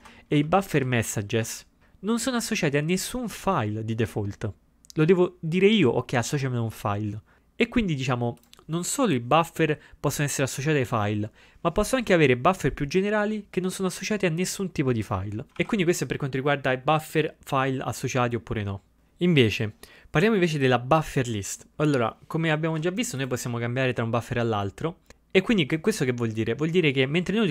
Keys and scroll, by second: 1.4 ctrl+g, 22.7 ctrl+g, 22.7 typing.